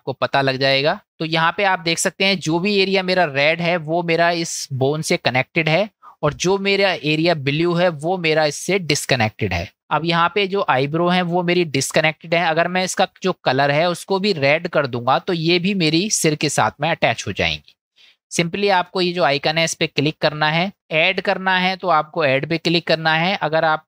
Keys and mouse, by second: 2.8 middle click, 6.4 middle click, 8.6 middle click, 9.7 middle click, 15.5 middle click, 19.1-23.8 drag.